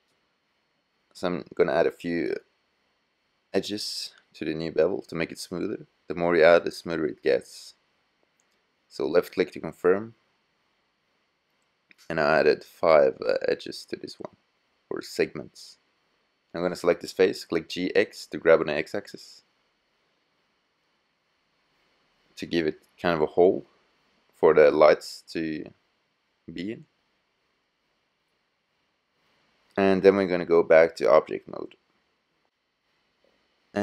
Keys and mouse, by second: 7.8-9.4 middle drag, 14.9 click, 14.9-16.6 middle drag, 16.6-18.9 drag, 16.6 g, 24.9 middle click, 26.6 click, 31.2 click, 31.8 middle click, 33.7-33.8 middle drag.